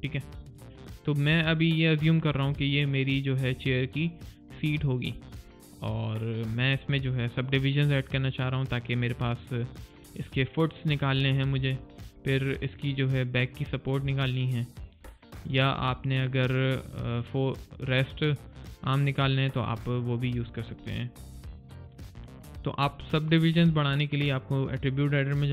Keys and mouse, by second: 0.1 alt+right click, 0.4 alt+click, 0.8 alt+middle click, 1.5 alt+click, 3.1 alt+middle click, 3.4 alt+click, 5.0 alt+right click, 5.3 alt+click, 6.7 alt+middle click, 7.0 alt+click, 12.0 alt+right click, 12.5 middle click, 12.8 click, 14.7 right click, 15.0 middle click, 15.4 click, 15.9 middle click, 16.2 click, 20.4 alt+right click, 20.7 alt+click, 21.2 alt+middle click.